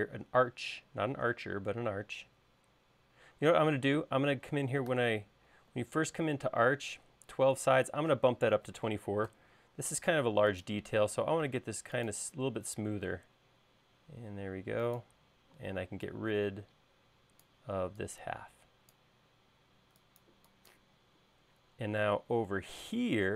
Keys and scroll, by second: 3.7 Escape, 4.8-6.3 typing, 8.4-9.4 typing, 15.6 e, 23.1 l.